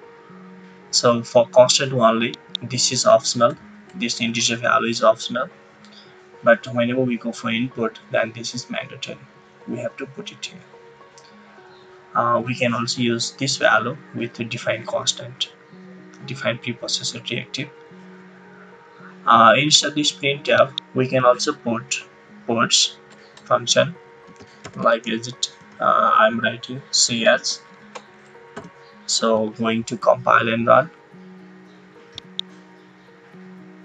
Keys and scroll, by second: 3.8 BackSpace, 4.4 BackSpace, 21.5 BackSpace, 22.2 BackSpace, 23.3-25.5 typing, 26.7-28.5 typing, 27.7 Right.